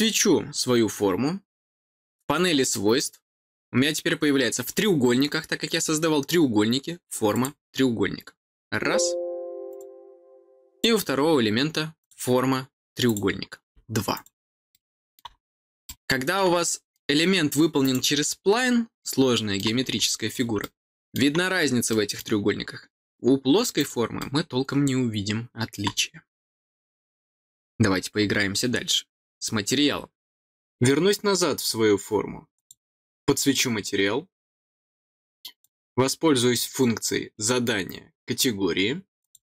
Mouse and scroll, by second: 2.3 click, 7.3 click, 9.6 click, 10.7 click, 11.9 click, 13.0 click, 14.1 click, 14.7 middle click, 15.8 middle click, 16.6 middle click, 17.8 click, 18.2-19.5 middle drag, 20.2 middle click, 20.5 middle click, 21.8 middle click, 23.7 click, 24.1-25.7 middle drag, 31.1 click, 34.2 click.